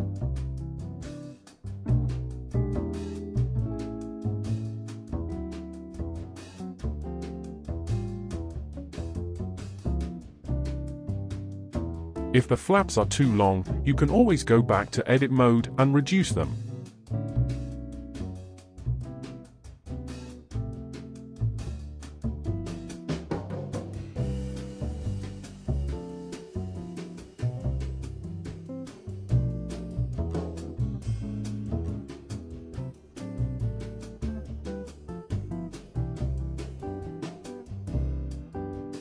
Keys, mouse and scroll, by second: 1.2 ctrl+z, 1.9 r, 4.7 click, 5.1 click, 6.3 r, 9.2-10.1 middle drag, 10.1-10.8 scroll up 5, 10.8-12.2 middle drag, 12.2 r, 19.1 ctrl+z, 19.5 ctrl+z, 19.9 ctrl+z, 20.1 ctrl+z, 20.2 ctrl+z, 20.4-20.7 scroll down 4, 20.7-21.1 middle drag, 21.1 Tab, 21.2 click, 21.5 click, 21.9 Tab, 22.0 click, 22.2 drag, 23.3-23.7 drag, 23.8 click, 24.1 Tab, 24.2 click, 24.6 2, 24.7 click, 25.0 shift+click, 25.5 KP_1, 25.9-26.4 scroll up 5, 26.4 g, 27.2 middle click, 27.6 ctrl+z, 28.0 middle click, 28.8 KP_1, 30.2 g, 33.6-35.1 middle drag, 35.1-35.9 scroll up 3, 35.9-37.0 scroll down 2, 37.0 g.